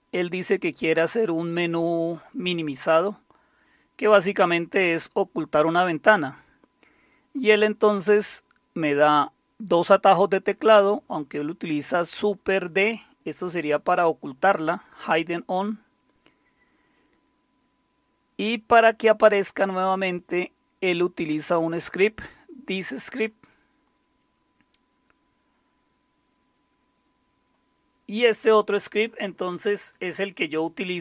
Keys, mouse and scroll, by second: 1.7 scroll up 1, 3.1-7.3 scroll down 6, 7.3-8.4 scroll down 2, 16.0-17.2 scroll down 1, 17.9-18.7 scroll down 1, 18.7-20.2 scroll down 1, 20.2-21.2 scroll down 1, 21.2-23.1 scroll down 1, 23.1 click, 26.2-27.5 scroll down 3.